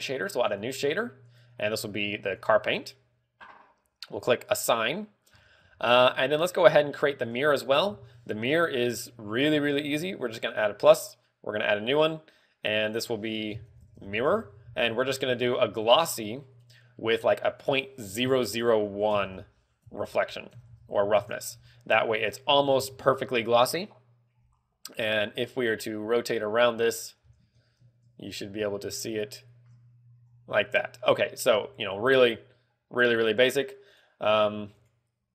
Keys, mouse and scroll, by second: 1.7 click, 5.0 click, 5.7-6.4 scroll down 4, 6.2 z, 6.4 middle click, 7.2-7.6 scroll up 2, 7.5 a, 8.4 l, 9.2 middle click, 11.0 click, 11.1 click, 12.1 click, 13.4 click, 15.8 click, 18.0 ctrl+click, 23.4 Tab, 25.8 scroll down 2, 26.5 middle click, 26.5 scroll down 1, 27.4-27.9 scroll up 9, 28.9 scroll down 1, 29.2 shift+middle click.